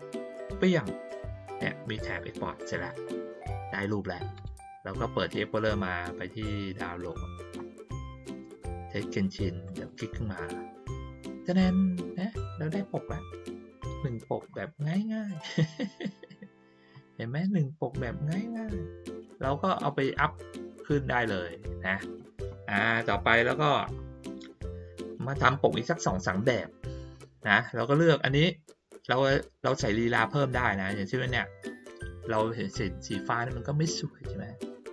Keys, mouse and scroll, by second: 0.5 click, 4.3 click, 6.9 click, 9.6 click, 9.8 click, 21.5 click, 23.3 click, 25.7 middle click, 27.5 click.